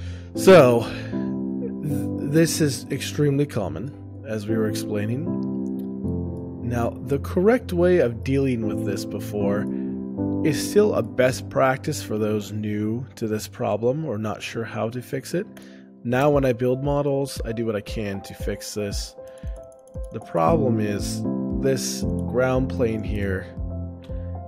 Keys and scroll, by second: 2.3 o, 2.5 shift+space, 4.5 o, 4.9 shift+space, 7.3 o, 8.3 shift+space, 11.4 o.